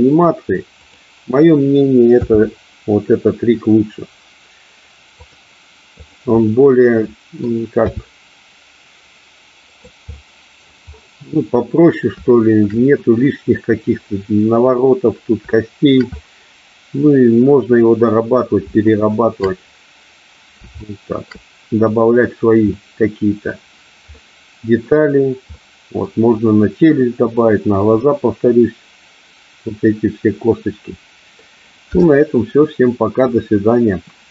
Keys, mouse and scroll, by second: 0.9 click, 5.3 click, 6.2 click, 6.6 middle click, 9.8 click, 10.1 middle click, 12.3 shift+middle click, 15.7 shift+middle click, 16.3-18.6 middle drag, 19.0-19.4 shift+middle drag, 20.9-21.4 shift+middle drag, 22.8-23.6 middle drag, 24.3-24.9 middle drag, 25.7 middle click, 28.2-31.5 middle drag.